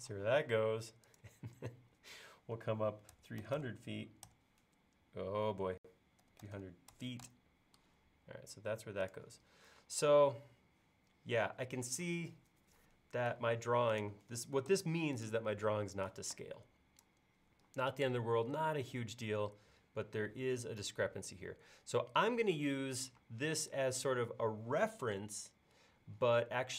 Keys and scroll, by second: 0.0-0.2 typing, 3.2 typing, 5.0-8.4 typing, 9.8 space, 14.7 BackSpace, 15.7 e, 23.2 space.